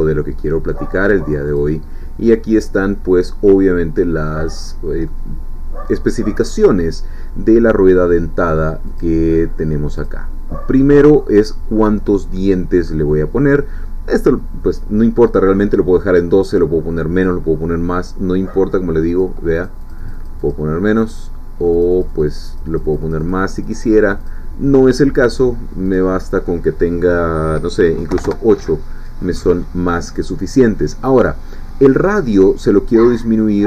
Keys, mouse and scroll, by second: 0.0 scroll up 2, 0.4 middle click, 1.5 click, 3.5-7.2 middle drag, 8.9 click, 10.0 click, 19.1 click, 19.6-20.8 drag, 21.7-24.5 drag, 25.9 click, 28.1 8, 28.3 Return, 32.9-33.6 drag.